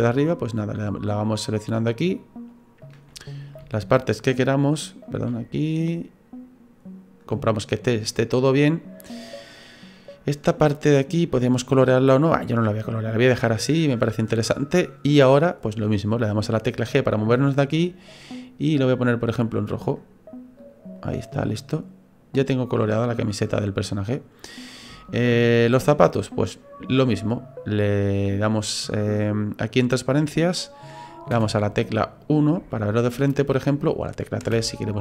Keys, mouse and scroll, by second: 0.3 shift+right click, 0.7 shift+right click, 1.2 shift+right click, 1.5 shift+right click, 2.1 shift+right click, 2.5 shift+right click, 2.8 shift+right click, 3.1 middle click, 3.9 shift+right click, 4.2 shift+right click, 4.7 shift+right click, 5.0 shift+right click, 5.3 middle click, 12.3-13.1 scroll down 3, 12.6 middle click, 16.8 g, 20.6 click, 21.0 right click, 21.5 middle click, 24.9 shift+middle click, 25.6 middle click, 29.4 click, 31.3 KP_1, 32.2-32.7 scroll up 4, 32.7 shift+middle click, 34.4 KP_3.